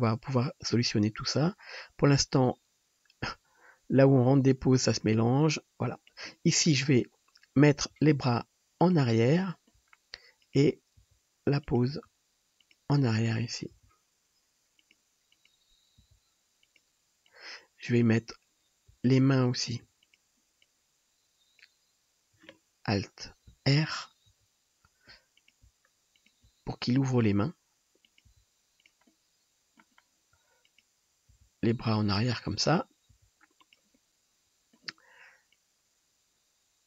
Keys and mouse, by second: 6.9-15.5 drag, 7.9 g, 10.4 middle drag, 10.4 right drag, 11.1 g, 12.0 r, 13.7 g, 15.3 middle click, 15.3 right click, 15.6-17.3 drag, 16.0 g, 19.6-20.6 shift+drag, 22.4-35.6 drag, 24.3 alt+r, 27.2 r, 28.3 g, 30.6 middle click, 30.6 right click, 32.6 middle click, 32.6 right click, 33.3 g, 34.4 right click, 35.6-36.8 middle drag, 35.7-36.8 drag, 35.7-36.8 right drag.